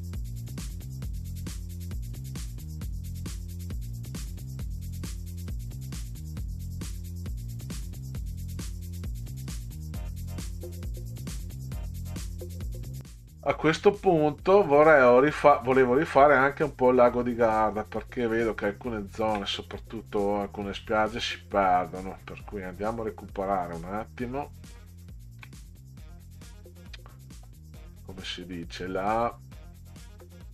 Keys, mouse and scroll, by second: 0.9 ctrl+scroll up 2, 1.3 Right, 2.0 Right, 2.6 alt+Left, 3.4 click, 3.8 Down, 3.8 Right, 4.5 click, 4.8 Left, 4.9 click, 5.0 click, 5.1-6.2 typing, 5.7 click, 6.7 click, 7.4 shift+click, 9.6 click, 10.0 click, 10.6 click, 10.8-11.6 typing, 10.9 click, 12.5 click, 13.0 middle click, 13.5-14.1 middle drag, 21.3-21.9 ctrl+scroll down 3, 21.6 ctrl+scroll up 2, 22.4 ctrl+scroll down 2, 23.2-23.7 ctrl+scroll down 4, 27.0 middle click, 27.8 middle click, 29.6 middle click.